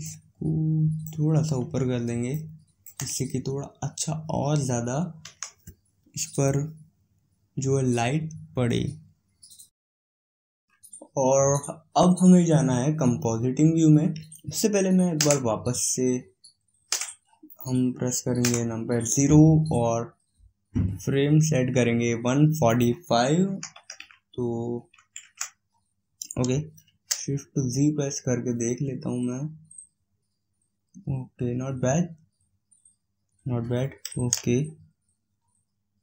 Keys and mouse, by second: 5.2 KP_1, 17.3 click, 18.3 KP_0, 22.5-24.4 drag, 26.7 shift+z, 31.2-34.2 middle drag, 34.2 shift+z.